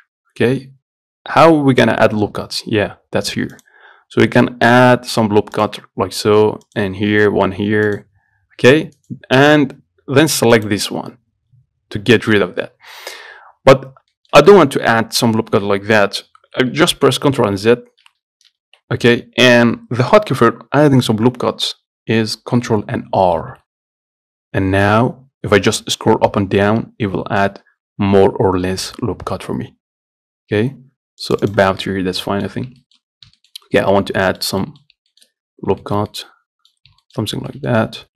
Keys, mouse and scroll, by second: 3.8-9.2 drag, 9.2-10.8 right drag, 10.8-12.6 drag, 12.6-14.0 middle drag, 14.0-14.4 scroll up 1, 14.4-17.8 shift+middle drag, 17.8 ctrl+z, 18.3 ctrl+z, 23.6 ctrl+r, 32.0-33.3 middle drag, 33.3-33.6 scroll up 1, 33.6 shift+middle click, 33.8-34.1 scroll down 2, 34.1 middle click, 35.1-36.1 scroll up 3, 35.3 shift+middle click, 36.1 shift+middle click, 37.0 scroll up 1, 37.3 shift+middle click, 37.5 scroll down 1, 37.8 middle click.